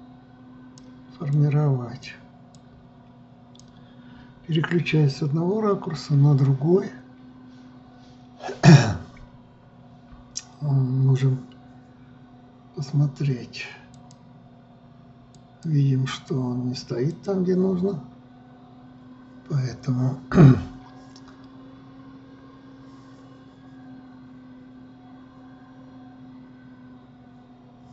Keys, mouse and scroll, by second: 5.5 KP_1, 14.5 click, 15.9 click, 16.7 click, 17.7 click.